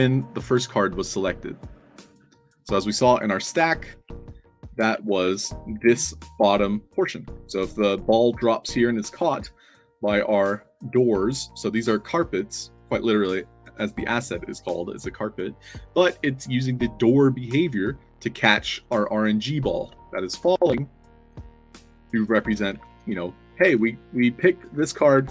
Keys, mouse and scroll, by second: 1.0 scroll up 2, 3.5 alt+drag, 3.9-5.3 typing, 6.5-7.2 alt+drag, 7.1 alt+d, 7.3 w, 19.5 d, 19.8 space, 21.2-25.3 typing.